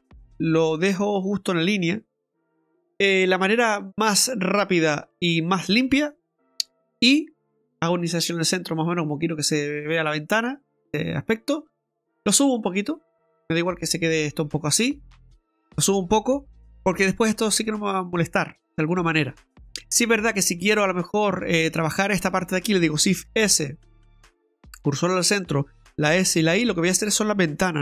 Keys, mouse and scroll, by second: 2.8 ctrl+r, 2.8 ctrl+z, 6.8 i, 12.2 click, 20.2 click, 21.2 right click, 22.2 shift+right click, 23.2 shift+s, 25.8 shift+s.